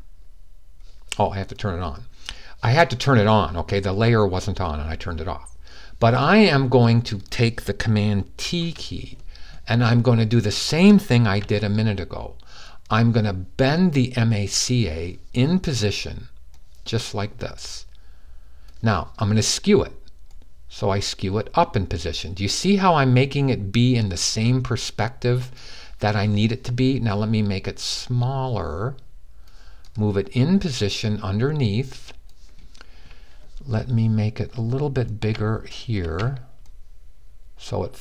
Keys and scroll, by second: 8.2 super+t.